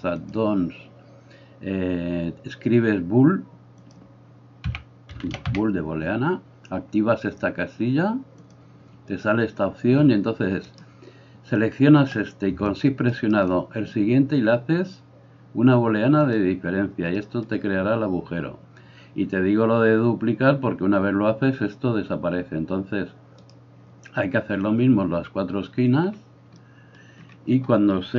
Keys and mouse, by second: 10.7 middle click, 10.7 right click, 13.1 shift+middle click, 13.1 shift+right click.